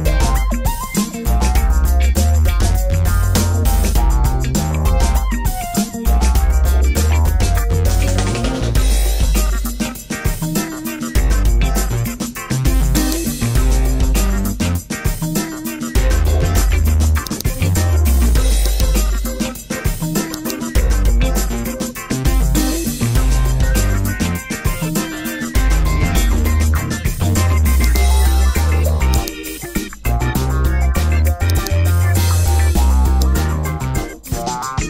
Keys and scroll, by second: 0.0 1, 0.8 Return.